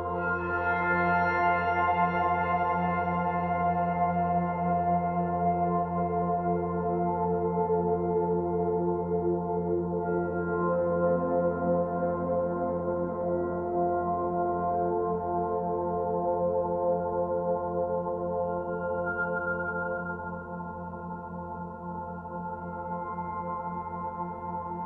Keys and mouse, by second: 0.0 8, 0.3 Return, 1.6-2.3 typing, 4.3 click, 5.5-7.3 typing, 5.7 click, 6.7 click, 7.7 click, 8.3 click, 9.4 click, 10.3-11.6 typing, 12.1 click, 12.7 click, 14.6-15.5 drag, 16.0-17.0 drag, 18.0 click, 20.5 alt+click, 21.6 click, 24.7 alt+click.